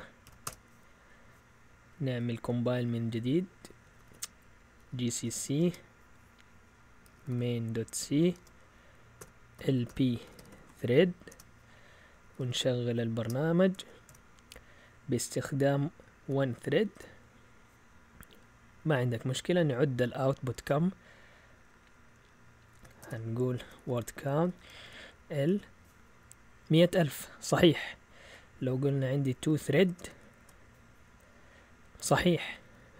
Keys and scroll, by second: 0.0-0.7 typing, 2.1 Up, 2.5 Up, 2.8 Up, 3.1 Up, 3.7 Down, 3.8 Down, 4.0 Down, 4.1 Down, 4.3-5.7 typing, 6.8-14.5 typing, 16.2 1, 16.9 Return, 18.9 Up, 20.4-21.2 typing, 23.0-25.4 typing, 27.0-30.5 typing, 28.2 Left, 32.3 Up, 32.6 Left, 32.8 Left.